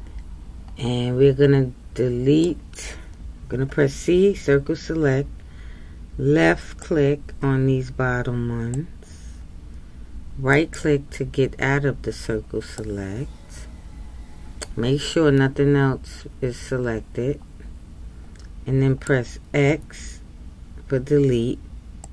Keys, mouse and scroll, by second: 12.8-15.8 middle drag.